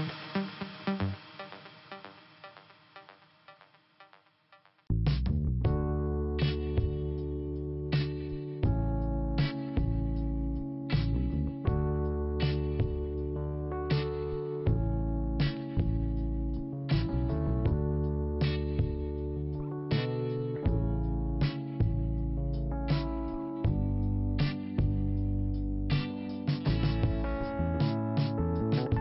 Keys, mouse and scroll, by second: 0.0 click, 0.7-1.3 scroll up 2, 1.3 click, 2.2 click, 3.7 click, 5.2 click, 6.0 click, 7.0 click, 7.4 click, 8.5 click, 9.0 click, 11.5-12.0 scroll down 2, 12.0 middle click, 12.6-13.2 scroll up 1, 13.2 click, 14.8 click, 15.7 click, 17.4 click, 18.4 middle click, 19.3 click, 20.4 click, 21.4 click, 23.0 click, 24.0 middle click, 25.1 click, 28.6 click.